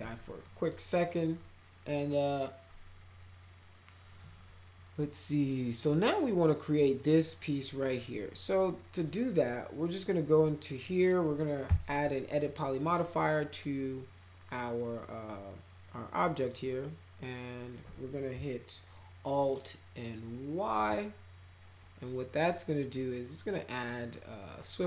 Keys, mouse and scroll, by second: 0.4 middle click, 1.0 middle click, 5.3 middle click, 8.9 click, 9.9 click, 10.9 click, 11.6 e, 12.8 click, 16.4 click, 20.6 alt+y, 23.6 click, 23.8 right click.